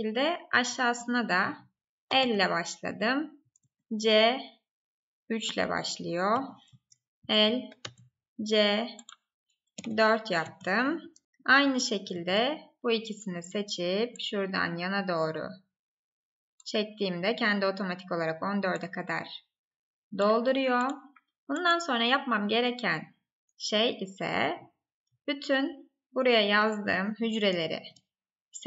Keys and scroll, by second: 6.6 Up, 7.1 ctrl+c, 7.5 Right, 10.7 Up, 11.2 Left, 27.5 ctrl+shift+Right.